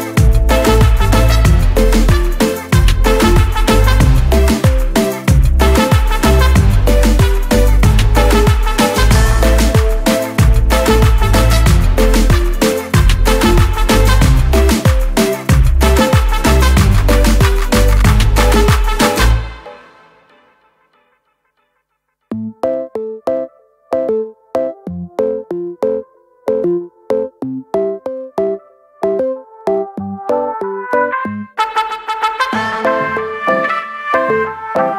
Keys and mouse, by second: 2.0 click, 6.8 click, 8.8 click, 10.0 click, 11.8 click, 13.4 click, 15.5 right click, 16.4 click, 17.7 click, 19.8 click, 23.8 right click, 25.6 click, 27.8 click, 30.1 right click, 31.2 click, 33.3 click.